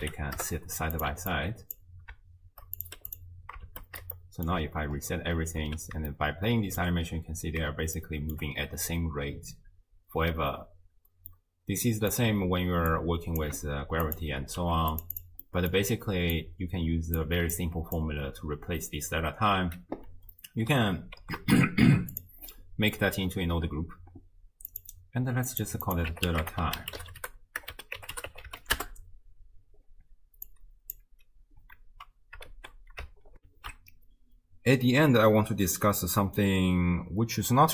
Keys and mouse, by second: 1.3 alt+click, 2.8 click, 3.7 shift+space, 4.3 shift+click, 5.6 space, 6.2-6.8 shift+drag, 8.0-8.4 shift+middle drag, 10.9 space, 11.3 middle click, 11.8 click, 11.9 middle click, 12.0 click, 12.9 click, 14.1 shift+click, 14.6 g, 15.2 click, 15.5 click, 16.4 click, 17.5 click, 21.2 ctrl+g, 22.1 click, 22.9 middle click, 25.5 click, 25.9-28.8 drag, 30.6 click, 32.5 shift+space, 33.7 ctrl+alt+shift+q.